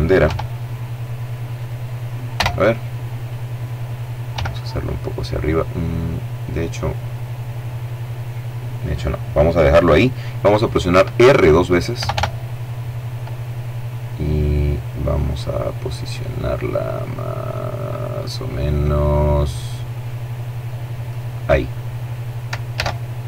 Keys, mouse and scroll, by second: 0.8 click, 1.6 KP_0, 3.6 g, 7.4 click, 11.2 r, 20.4 click, 22.0 alt+a.